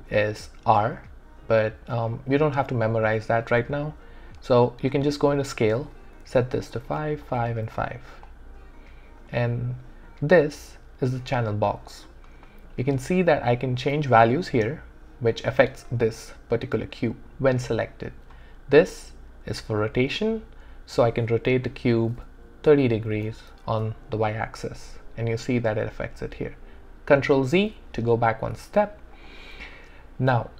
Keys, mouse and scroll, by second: 0.0 r, 4.4 click, 6.2 5, 6.6 click, 6.8 5, 7.1 click, 7.4 5, 8.1 click, 20.2 click, 22.7-23.1 typing, 23.7 Return, 27.2 Return, 27.5 ctrl+z, 29.2 click.